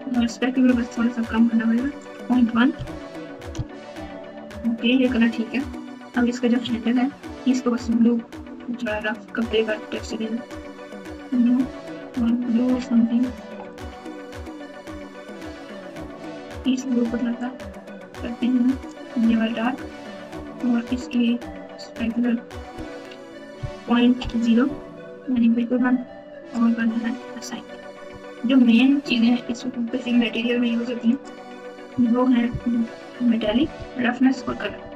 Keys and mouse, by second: 1.8-3.6 drag, 7.0 Tab, 10.3 click, 11.2 click, 13.7 click, 21.9-24.6 drag, 31.1 click, 31.9 Tab, 32.7-34.9 typing.